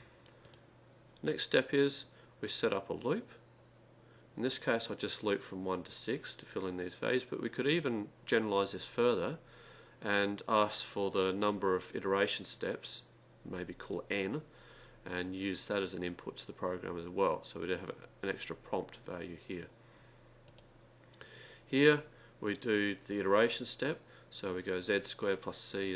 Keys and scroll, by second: 20.5 0.